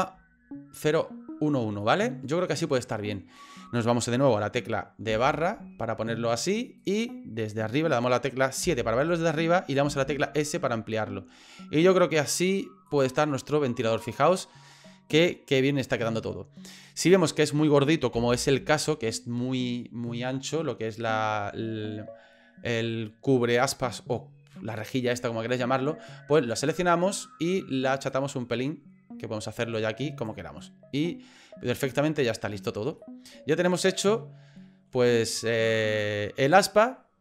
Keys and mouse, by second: 1.8 middle click, 2.9 middle click, 5.1 KP_Divide, 6.8 right click, 8.6 KP_7, 9.9 s, 13.3-16.1 middle drag, 16.8 middle click, 18.1 KP_1, 26.5 right click, 28.1-30.3 drag, 30.7-31.8 middle drag, 33.0 middle click, 33.7 right click, 34.1 middle click.